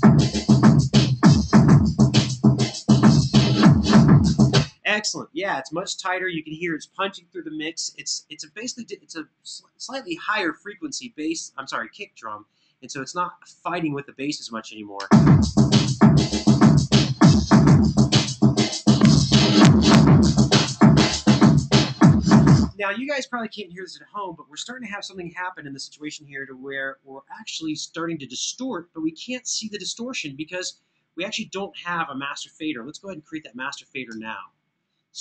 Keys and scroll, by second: 4.2 space, 14.7 space, 22.3 space, 33.0 shift+super+n, 34.0 super+Right, 35.1 super+Down.